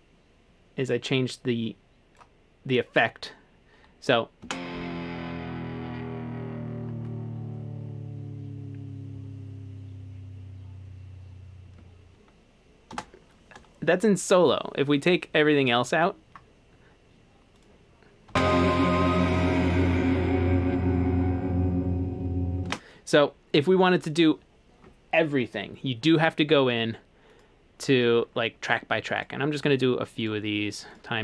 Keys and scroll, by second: 1.0 typing, 4.5 space, 12.9 space, 15.9 Home, 18.3 space, 22.7 space.